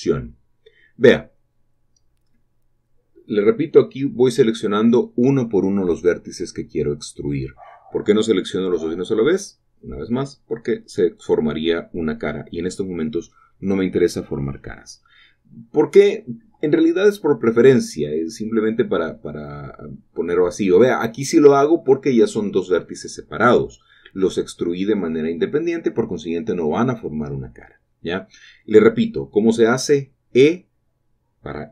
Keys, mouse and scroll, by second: 0.0-0.8 typing, 0.0 shift+click, 2.0 typing, 2.9 shift+middle click, 4.6 click, 5.8 typing, 7.5 shift+click, 9.7 shift+click, 9.7 typing, 12.4 click, 13.3-14.1 scroll down 3, 14.2 shift+middle click, 17.1 click, 17.6 typing, 19.3 shift+click, 19.7 shift+click, 19.9-20.3 scroll down 2, 23.3 shift+middle click, 25.6 shift+click, 26.0 click, 27.4 typing, 27.9 shift+click, 29.0 typing, 30.5 shift+click, 31.2 typing.